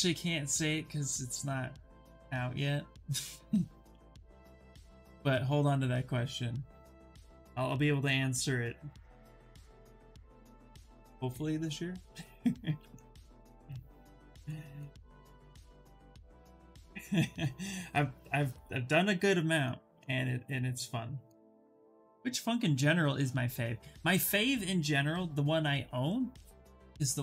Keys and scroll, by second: 8.1 s, 11.9 s.